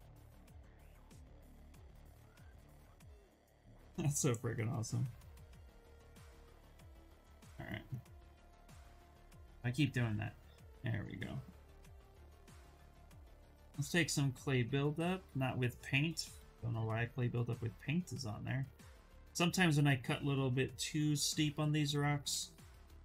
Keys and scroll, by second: 0.5-1.7 typing, 12.5 b, 14.3 ctrl+z, 14.8 space.